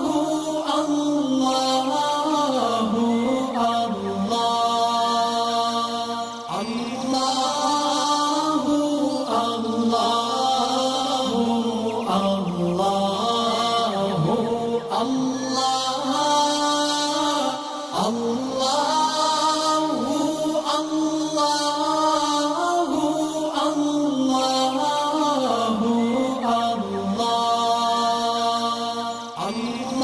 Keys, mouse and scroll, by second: 5.6 ctrl+shift+], 6.3 click, 6.7 alt+scroll down 1, 7.1 alt+scroll up 1, 7.5 space, 7.6 click, 13.1 alt+scroll down 1, 13.4 space, 13.6 click, 14.0 alt+scroll up 1, 16.5-17.8 alt+drag, 18.9-20.2 alt+drag, 24.8-25.8 shift+drag, 29.0-29.8 alt+scroll up 2, 29.9-30.0 drag.